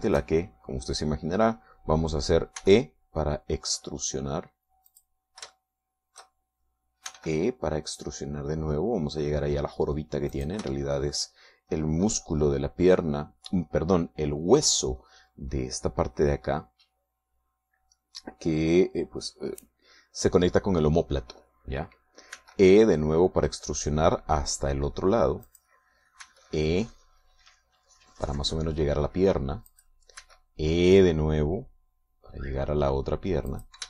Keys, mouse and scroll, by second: 0.6 shift+middle click, 3.6 e, 6.0 click, 6.6 shift+middle click, 8.2 e, 11.4 shift+click, 11.8 shift+middle click, 23.4 e, 26.6 click, 27.3 e, 30.8 click, 31.3 e.